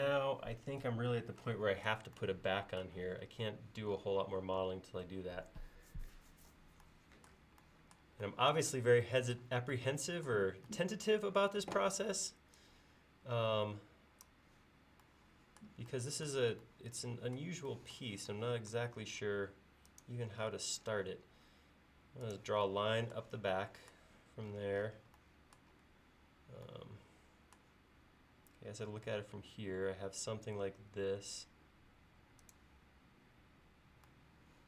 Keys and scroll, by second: 25.9 l.